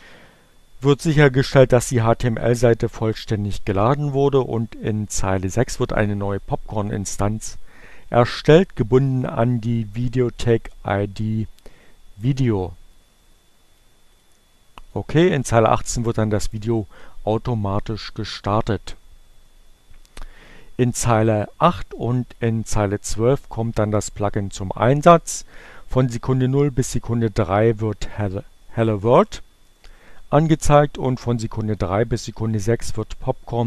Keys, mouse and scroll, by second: 6.2 click, 9.4-11.6 drag, 15.0-16.6 drag, 16.8 click, 18.0 click, 21.8 click, 23.9 click, 26.5 click, 27.8 click, 28.7-30.2 drag, 33.1-33.6 drag.